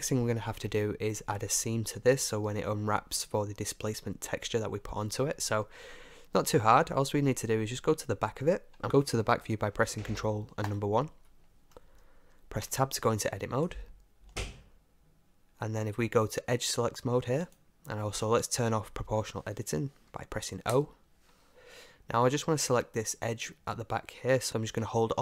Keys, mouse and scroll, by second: 2.2-8.8 middle drag, 12.7 Tab, 13.9-15.6 middle drag, 17.5-19.3 drag, 20.7 o, 21.5-23.6 middle drag.